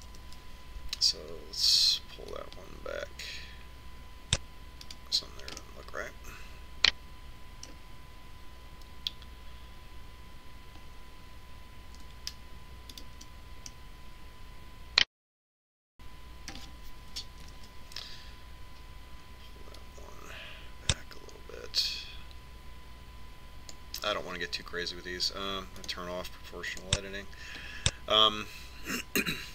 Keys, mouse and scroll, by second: 2.0 ctrl+KP_7, 5.4 click, 7.5-9.5 middle drag, 14.9-15.9 right drag, 15.7-17.7 middle drag, 18.5 ctrl+KP_7, 20.8 click, 21.9 click, 26.9 click, 28.8-29.5 middle drag.